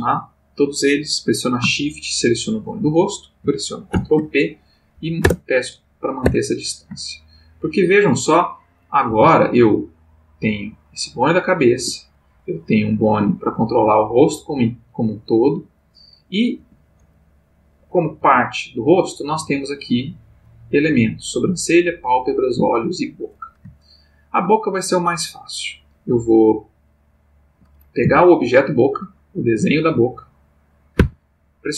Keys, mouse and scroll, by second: 2.2 shift+click, 3.9 ctrl+p, 4.9 Down, 5.2 Return, 6.2 Tab, 7.1 ctrl+middle click, 7.8 ctrl+scroll up 2, 8.1 ctrl+click, 9.1 r, 11.7 Escape, 12.5 click, 13.4 g, 16.5 Escape, 18.2 g, 18.9 Escape, 19.7-20.6 drag, 21.1 click, 21.8 click, 22.4 click, 23.2 click, 23.9-24.6 ctrl+middle drag, 25.0 click, 26.8-27.8 shift+middle drag, 28.0 shift+g, 31.0 Escape.